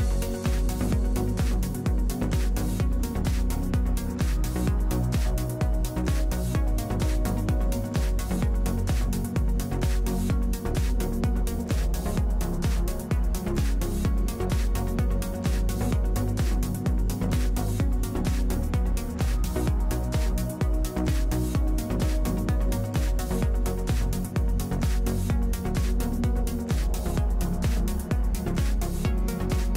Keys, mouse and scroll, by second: 1.2 click, 1.6 middle click, 2.5 w, 3.2 ctrl+shift+s, 4.2 shift+a, 5.0 click, 5.5 KP_1, 5.7 q, 5.7 w, 8.5 z, 8.8 z, 9.4 shift+s, 10.2 ctrl+a, 11.4 ctrl+shift+s, 16.9 ctrl+z, 17.3 ctrl+shift+s, 18.1 ctrl+shift+s, 18.7-19.7 drag, 19.3 ctrl+z, 20.3 ctrl+shift+s, 21.4 ctrl+shift+s, 22.0 KP_7, 22.2 z, 22.9 z, 24.3 z, 25.9 ctrl+p, 26.9 z, 27.6 q, 27.7 q, 29.5 KP_1.